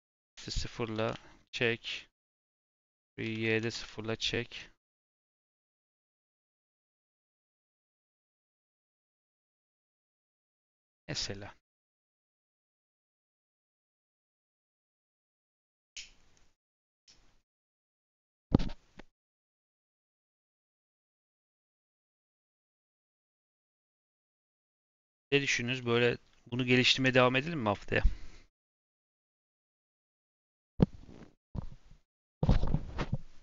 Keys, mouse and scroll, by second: 0.9 g, 2.2 click, 3.2 s, 5.3 click, 5.8 g, 8.3 click, 8.7 g, 10.1 Tab, 10.2 scroll down 4, 10.5 middle click, 10.9-11.5 scroll down 3, 11.5-11.9 scroll up 3, 12.0-12.4 scroll down 1, 12.4 click, 12.8-14.1 scroll up 1, 20.9 shift+middle click, 21.2-21.6 scroll up 2, 21.6 scroll down 2, 21.8-22.8 scroll up 1, 22.8 click, 23.5 click, 24.0 g, 24.9-27.0 shift+middle drag, 27.0 click.